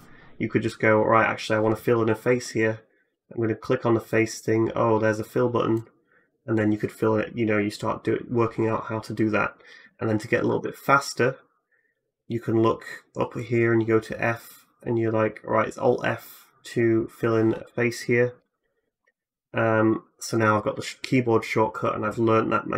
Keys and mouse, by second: 3.1-22.7 drag, 10.3 ctrl+z, 18.8 alt+f.